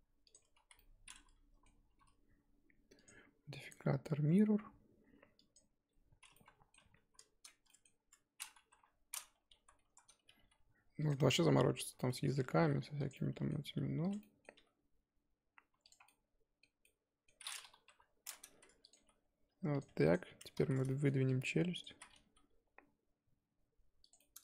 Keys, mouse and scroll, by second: 0.4 Tab, 0.6 z, 0.7 scroll down 1, 0.8-1.9 middle drag, 1.9 KP_1, 2.9 click, 3.6 click, 5.5 click, 6.3 middle click, 6.7 KP_3, 7.7-8.7 middle drag, 8.7 KP_3, 9.3 Tab, 9.5 z, 9.8 a, 10.2 g, 11.3 middle click, 11.6 z, 12.0-12.5 scroll down 2, 12.1 middle click, 12.5 r, 13.1 middle click, 13.7 g, 14.2 middle click, 14.5 s, 16.1-17.8 middle drag, 17.8 KP_3, 18.5 r, 18.9 g, 19.8 Tab, 20.0 click, 20.4 Tab, 20.6 z, 20.9 shift+middle click, 21.3 click, 21.9 z, 22.2 g, 24.2-24.4 middle drag.